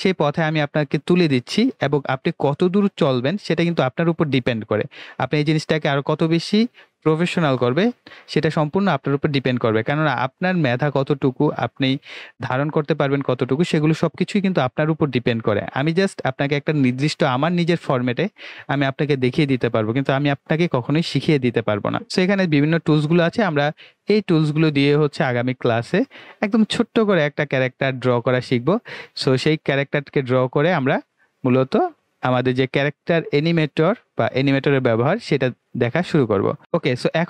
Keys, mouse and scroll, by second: 23.3 click, 32.9 click, 36.6 click.